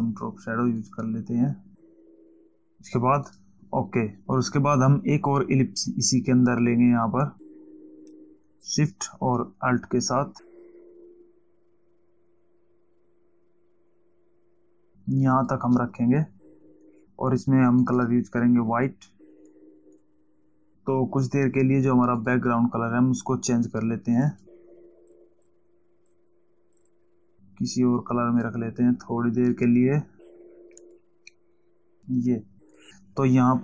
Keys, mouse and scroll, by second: 1.3 click, 3.8 click, 7.4 click, 18.4 click, 19.3 click, 20.3 click, 22.7 click, 24.6 click, 25.4 click, 26.4 click, 27.0 click, 28.9 click, 30.0 click, 31.2 alt+BackSpace, 33.1 click.